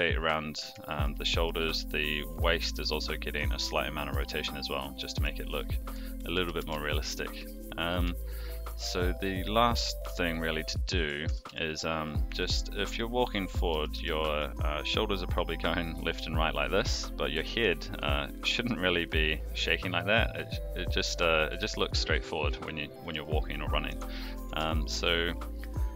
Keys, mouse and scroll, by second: 0.8 shift+middle drag, 1.2 middle drag, 2.6-2.9 middle drag, 3.3-3.7 middle drag, 3.7-4.1 scroll down 1, 4.2 shift+middle drag, 4.6-5.2 middle drag, 5.2-5.9 scroll down 1, 6.3 alt+g, 6.6 alt+r, 6.9-7.4 middle drag, 8.1-8.6 shift+middle drag, 9.1-9.7 middle drag, 10.3-11.1 shift+middle drag, 11.2 r, 12.4-12.9 middle drag, 12.9 scroll down 1, 13.9 r, 20.9-21.5 middle drag, 21.5-22.1 scroll down 1, 22.1-22.4 middle drag, 22.4 scroll down 1, 23.0 r, 24.5 alt+r, 24.8-25.6 middle drag.